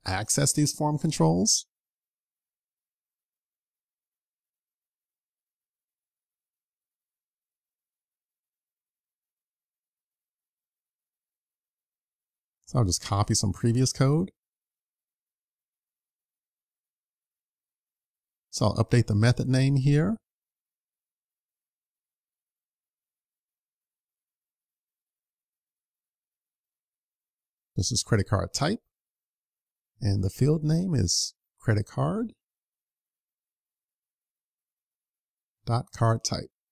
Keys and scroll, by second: 14.8 super+c, 15.8 super+c, 16.0 super+v.